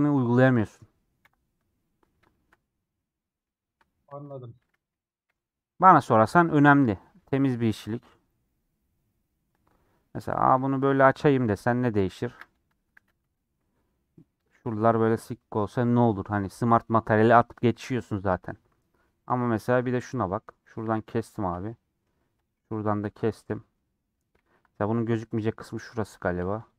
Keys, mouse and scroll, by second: 1.1 h, 2.2 shift+middle click, 2.8 scroll down 1, 2.9-4.2 middle drag, 4.2-5.2 drag, 5.2 /, 5.6 middle click, 6.1 /, 6.7 middle click, 7.0 Tab, 8.3-10.4 middle drag, 10.4 a, 11.6 middle click, 12.0 Tab, 13.6 middle click, 14.1-14.5 scroll down 2, 14.5-18.3 middle drag, 18.3 2, 18.6-20.3 middle drag, 20.3 alt+click, 20.9 a, 21.6 middle click, 22.0 2, 24.4 ctrl+z, 24.8-26.1 middle drag, 26.1 click.